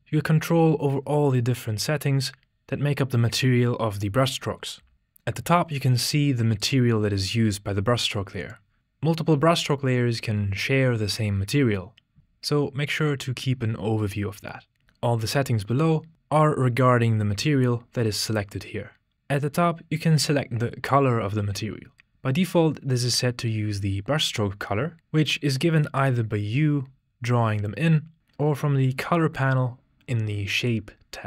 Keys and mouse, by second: 6.6-8.4 drag.